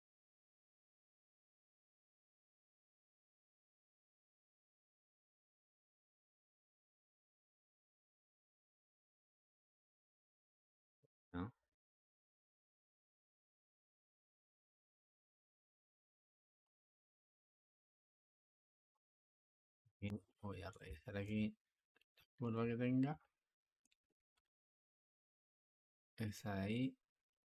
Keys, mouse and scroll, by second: 4.7 r, 7.5-8.4 drag, 8.4 space, 11.8 click, 15.4 click, 16.5 Escape, 17.0-27.4 drag.